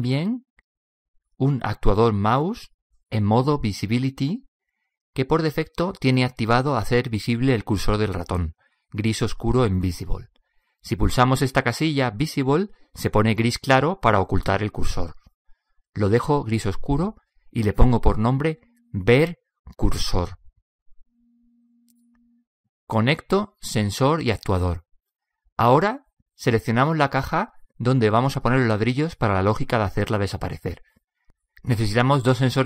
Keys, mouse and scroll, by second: 26.5 click, 27.2-32.6 right drag.